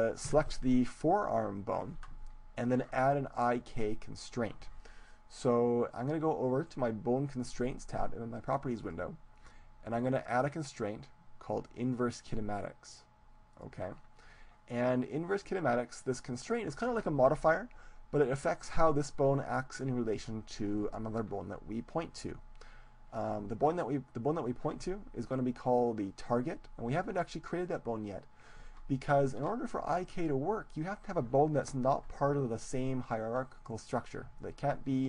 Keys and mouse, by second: 0.3 Tab, 8.9-12.1 drag.